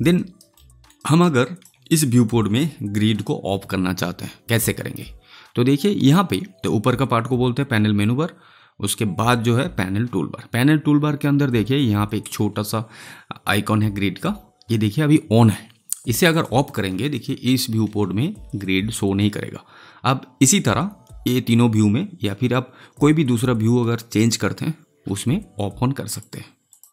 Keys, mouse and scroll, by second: 0.1 alt+right click, 0.5 alt+middle click, 0.9 alt+right click, 1.3 alt+click, 17.5 space, 26.1 click.